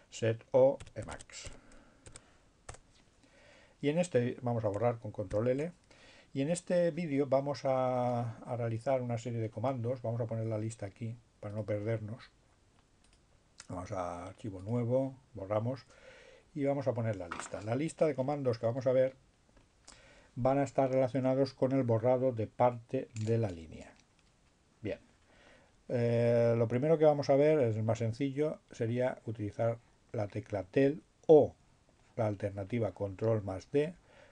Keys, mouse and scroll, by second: 0.4-2.0 typing, 2.3 Return, 3.8 ctrl+l, 11.7 click, 13.2 click, 14.7 click, 28.8-30.6 drag, 31.7-34.3 drag.